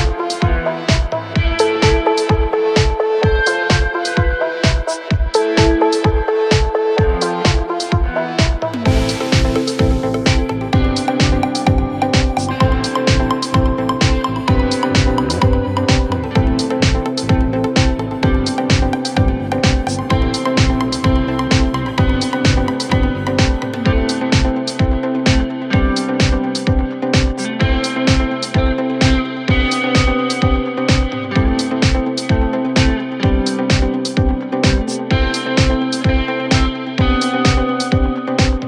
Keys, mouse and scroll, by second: 0.8 click, 1.0 click, 4.4 click, 7.3 click, 10.1-11.1 scroll down 1, 11.1-12.1 drag, 16.4 click, 16.5 click, 19.2 click, 27.4 scroll up 1, 29.3 click, 33.9 click, 35.5 Right, 37.5 Right, 38.4 Right.